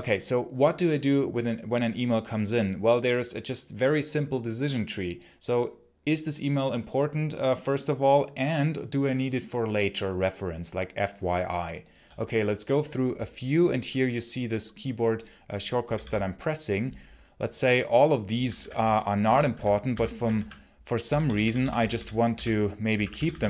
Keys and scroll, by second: 15.6 k, 18.2-20.9 typing, 22.1-23.4 typing.